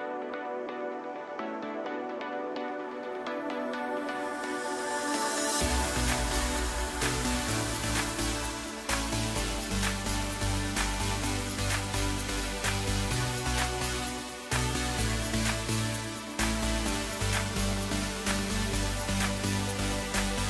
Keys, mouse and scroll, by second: 1.7 3, 2.1 click, 3.7 click, 4.4-6.0 drag, 6.0 2, 6.5 click, 6.8 click, 7.7 g, 10.6 scroll down 2, 11.7 Tab, 12.1-12.7 scroll down 7, 12.7-13.7 middle drag, 13.7-14.4 scroll up 4, 14.4-16.9 middle drag, 16.9 click, 18.7 click, 20.2-20.4 drag.